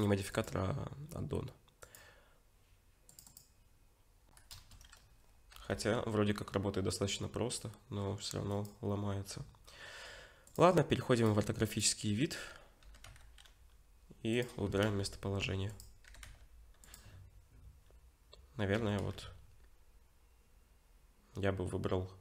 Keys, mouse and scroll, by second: 4.5 KP_0, 5.5 g, 10.5 click, 11.2 click, 12.8 g, 14.7 r, 16.1 g, 18.8 r.